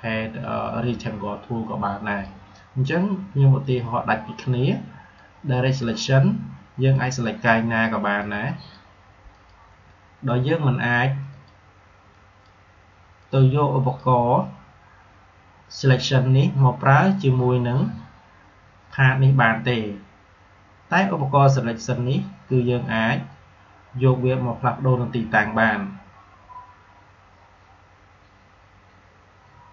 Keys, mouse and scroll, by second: 1.9-16.3 drag, 29.6 click.